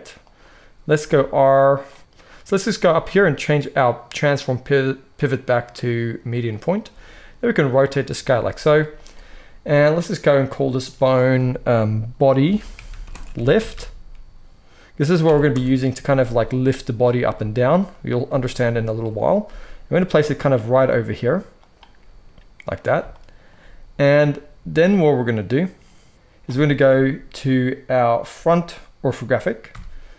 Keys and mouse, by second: 0.9 r, 2.0-8.4 drag, 6.8 r, 8.4-10.6 middle drag, 8.4 g, 10.6-21.7 drag, 17.1 g, 19.4 g, 21.7 middle click, 29.6 KP_1.